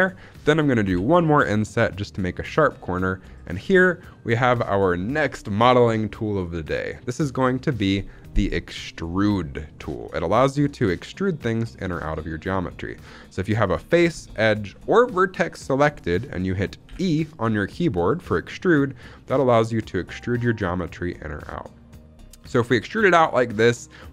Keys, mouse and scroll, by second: 0.9 i, 2.4 click, 2.7-3.3 scroll down 2, 3.3 shift+middle click, 3.6 scroll up 2, 8.2-8.8 scroll down 2, 8.8-9.7 scroll up 2, 9.7 middle click, 10.4 shift+middle click, 12.3 shift+middle click, 12.5-13.2 scroll up 1, 13.2-15.5 scroll up 1, 16.9 e.